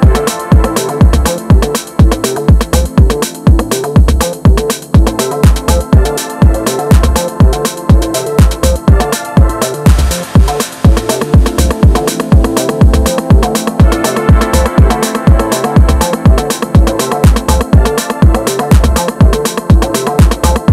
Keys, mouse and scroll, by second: 3.0 KP_1, 3.4-3.7 scroll up 2, 3.7-6.9 shift+middle drag, 6.9 Tab, 7.1-8.3 middle drag, 8.3-8.7 scroll up 2, 8.7 shift+middle click, 9.4 click, 12.4 click, 14.8 alt+z, 15.6 shift+click, 17.3 alt+z, 18.0 click.